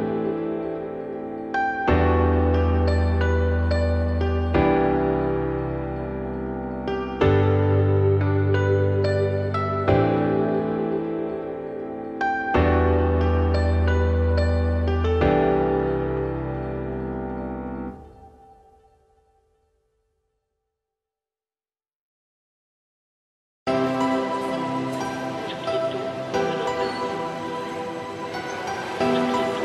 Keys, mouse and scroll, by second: 0.2-0.6 scroll up 6, 1.1 click, 2.6 scroll down 2, 2.8 middle click, 3.8 shift+s, 4.8 shift+a, 6.1 `, 6.6-6.9 scroll down 2, 6.9 r, 11.0-11.3 scroll up 2, 11.6 r, 15.1 g, 16.4 s, 18.4 g, 21.6 shift+middle click, 22.2 ctrl+r, 24.4 ctrl+z, 24.8 click, 25.7 scroll down 3, 26.0 g, 27.6 scroll up 2, 28.1 ctrl+b.